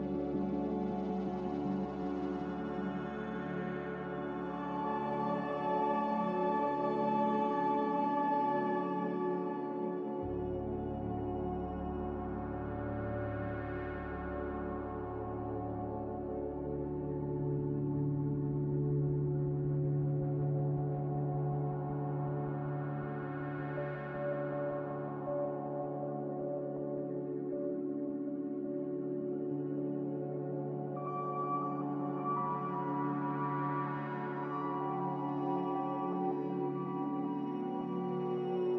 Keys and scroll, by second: 4.5 z, 11.4 b, 24.9 ctrl+z, 32.9 Escape, 34.1 Escape, 34.9 Escape, 35.1 Escape.